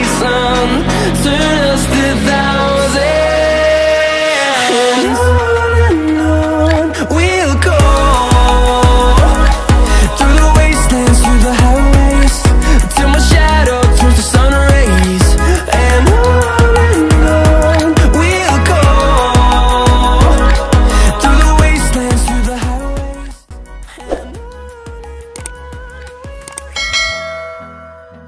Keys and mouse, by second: 0.0 click, 0.9 click, 2.3 click, 4.2 space, 8.4 click, 10.5 click, 13.8 click, 14.5 click, 17.8-19.5 drag, 23.4 click, 24.1 click, 24.7-25.1 shift+drag, 28.2 space.